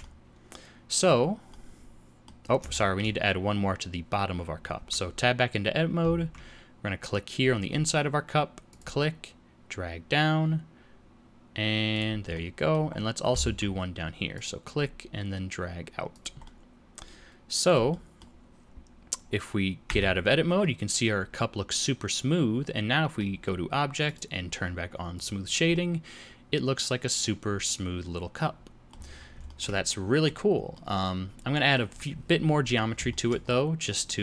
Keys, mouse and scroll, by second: 1.4 middle click, 2.4 scroll up 2, 2.7 shift+middle click, 4.7 Tab, 6.1 ctrl+r, 12.3 middle click, 12.9-13.2 scroll up 1, 13.4 ctrl+r, 16.4 middle click, 17.8 middle click, 19.8 Tab, 20.2-20.5 scroll down 2, 20.5 middle click, 24.0 click, 25.7 middle click, 29.1-29.4 scroll down 3, 29.4 shift+middle click, 30.7 middle click, 32.5 Tab, 33.0 shift+middle click, 33.4-33.8 scroll up 3, 34.0 middle click.